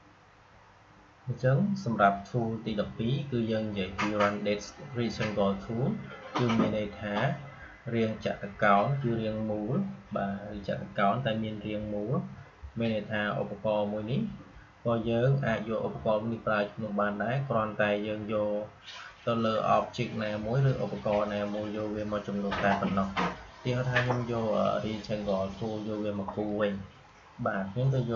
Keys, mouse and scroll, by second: 23.8-28.1 drag.